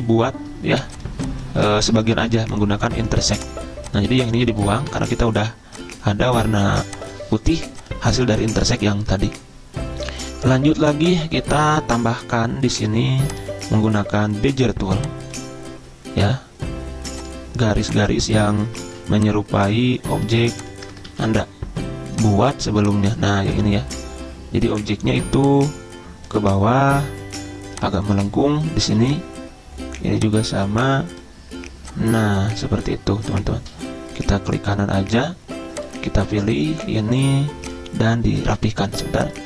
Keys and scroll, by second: 1.8 ctrl+z, 5.0 Delete, 19.0 ctrl+z, 20.1 ctrl+z, 20.4 ctrl+z, 21.2 ctrl+z.